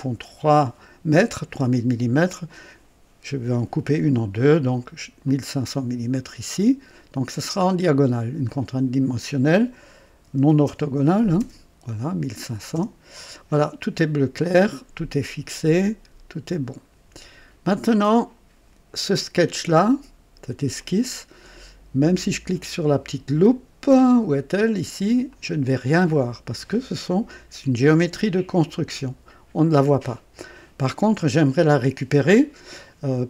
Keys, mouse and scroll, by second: 5.2 click, 8.4 click, 9.9 KP_1, 10.2 KP_5, 10.6 KP_0, 11.4 KP_0, 12.7 KP_Enter, 17.6-19.1 drag, 20.7 click, 25.3 click.